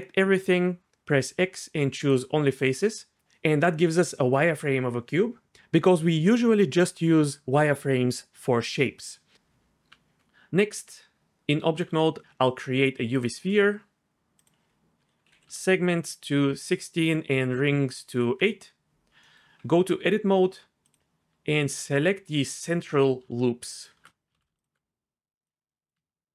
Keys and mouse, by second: 0.5 a, 1.1 x, 9.9 Tab, 11.7 shift+a, 14.4-18.5 drag, 19.6 Tab, 20.9 alt+click, 24.4 ctrl+z, 24.6 alt+shift+click, 25.4 click.